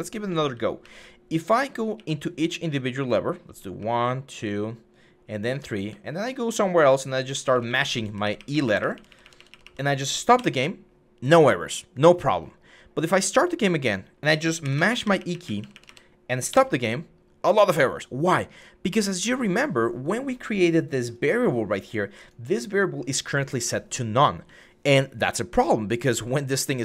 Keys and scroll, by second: 0.6-9.4 typing, 10.1 Escape, 14.4-15.6 typing, 16.3 Escape.